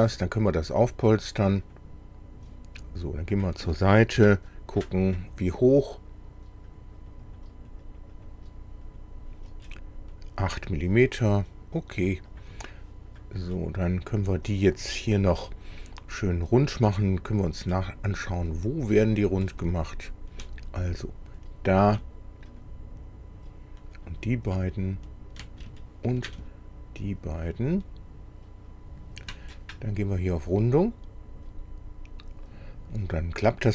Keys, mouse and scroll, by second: 1.7 click, 3.4 click, 4.2 KP_1, 6.7 click, 7.0 click, 8.9 click, 9.6-10.6 middle drag, 12.3 click, 13.5 middle click, 14.9 middle click, 15.8 middle click, 16.6 scroll up 1, 17.3 middle click, 19.3 click, 21.3 click, 22.5 ctrl+click, 24.0 ctrl+click, 25.8 ctrl+shift+middle click, 27.4 ctrl+click, 28.7 ctrl+click, 30.8 click.